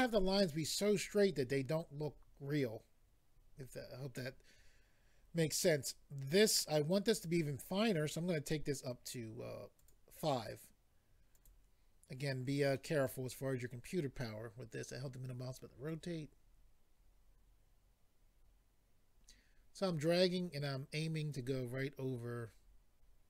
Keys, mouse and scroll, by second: 9.7 click, 9.9 click, 11.3 click, 11.4 click, 12.7 middle click, 15.9 click.